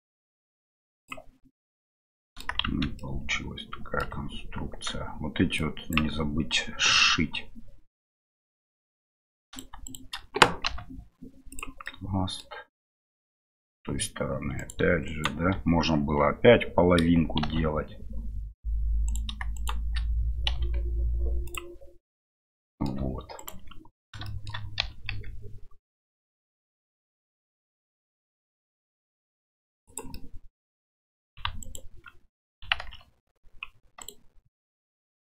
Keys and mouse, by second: 1.5 middle click, 2.6 shift+z, 2.9-4.0 middle drag, 5.7 click, 9.4 right click, 9.8 shift+right click, 11.8 middle click, 13.3 middle click, 14.6 right click, 15.0 shift+right click, 19.0 right click, 19.5 right click, 20.5 m, 22.4 middle click, 24.2 shift+middle click, 30.2-31.3 middle drag, 31.6 alt+right click, 32.8 ctrl+b, 34.5 middle click.